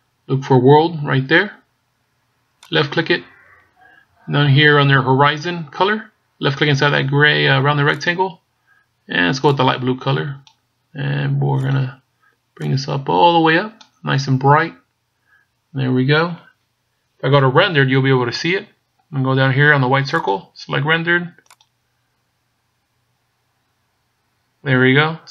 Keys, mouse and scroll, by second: 2.8 click, 7.9 click, 11.6 click, 20.1 click.